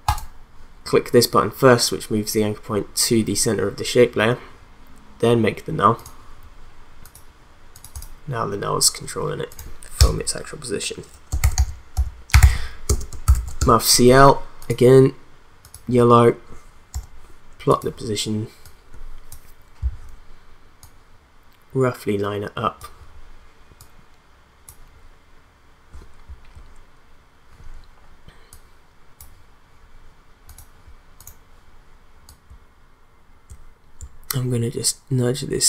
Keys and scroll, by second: 10.0 Return, 11.2-13.8 typing, 16.9 p.